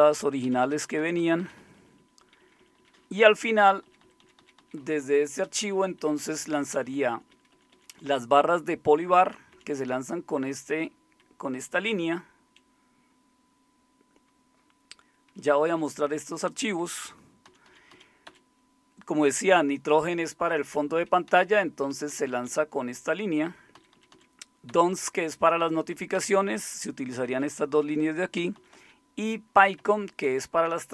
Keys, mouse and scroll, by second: 0.4 Down, 0.6 Down, 1.4 Down, 1.6 Down, 2.4 Down, 2.8 Down, 3.0 Down, 3.1 Down, 3.3 Down, 3.5 Down, 3.7 Down, 3.9 Down, 4.0 Down, 4.2 Down, 4.6 Down, 5.5 Up, 5.7 Up, 5.8 Up, 6.0 Up, 6.2 Up, 6.4 Up, 6.5 Up, 7.1 Up, 7.3 Up, 7.5 Up, 9.5 Down, 11.2-12.5 Left, 15.4 Right, 15.6-16.5 Right, 17.5 Down, 17.7 Down, 17.9 Down, 18.3 Up, 21.3 Down, 21.9 Left, 22.1 Left, 22.3 Left, 22.5 Left, 23.1 Left, 23.8 Down, 24.0 Down, 24.1 Down, 24.7 typing, 26.2-28.7 typing, 29.8 Up, 30.2 Down.